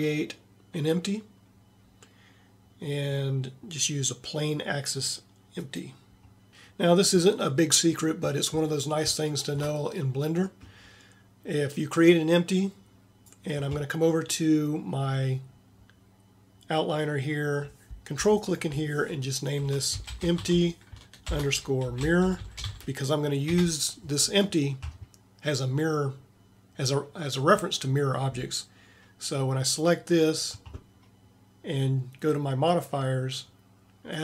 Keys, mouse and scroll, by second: 9.4 middle click, 22.4 r.